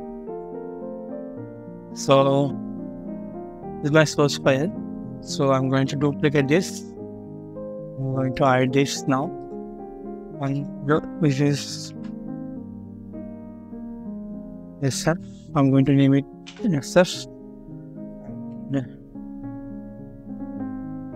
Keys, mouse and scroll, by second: 0.1 double click, 1.5 scroll down 1, 5.9 d, 6.4 shift+right click, 10.4 double click, 11.7 BackSpace, 14.1-14.6 typing, 16.2 Return, 19.7-20.6 scroll up 1, 20.6-21.1 scroll down 1.